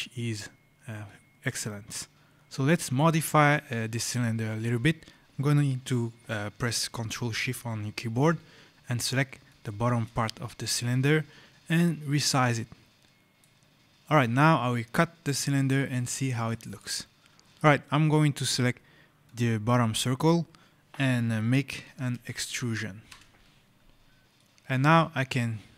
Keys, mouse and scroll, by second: 0.9 right click, 1.0-1.4 scroll, 2.4 right click, 4.0-4.4 scroll, 9.3 click, 11.5 click, 13.8 right click, 14.4 scroll, 15.9-16.4 scroll, 16.4 right click, 17.3 click, 19.1 click, 21.7 e, 23.0 Return, 24.2 right click.